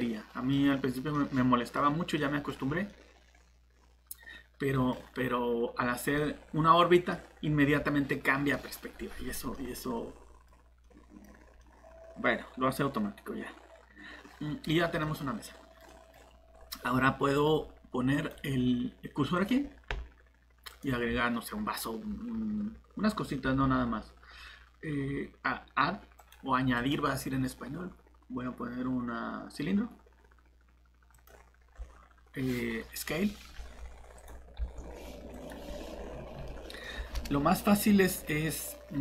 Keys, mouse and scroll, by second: 0.6 scroll up 1, 1.1 middle click, 2.5 scroll down 1, 2.9 middle click, 5.9 scroll down 1, 6.2 middle click, 11.3 scroll up 1, 11.6 middle click, 14.7 scroll down 1, 15.0 middle click, 16.1-16.4 scroll up 1, 16.5-17.2 scroll down 1, 17.2-18.1 scroll up 1, 18.1 click, 31.7 scroll down 1, 33.5 shift+s, 34.1 click, 34.6 s, 35.6 scroll up 1, 36.4 middle click.